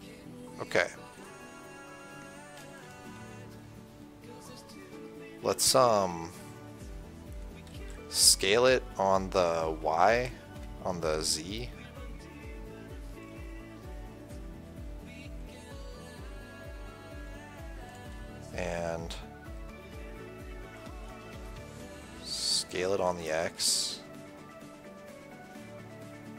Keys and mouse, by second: 3.0 KP_1, 3.5 KP_3, 6.9-8.1 middle drag, 8.1 s, 19.9-22.3 middle drag, 22.8 s.